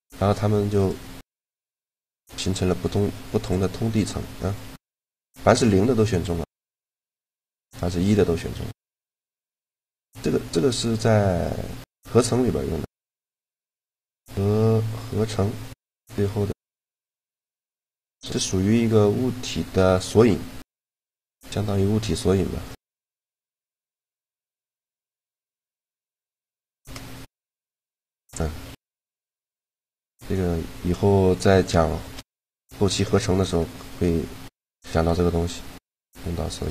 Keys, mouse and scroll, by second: 0.5-1.6 right drag, 1.6 shift+g, 4.3 g, 6.2-7.8 drag, 6.6 shift+g, 8.1 g, 22.5-24.4 middle drag, 24.9-26.5 right drag, 26.4 shift+g, 28.4 g, 32.1-35.4 middle drag, 35.8 middle click, 36.3 right click.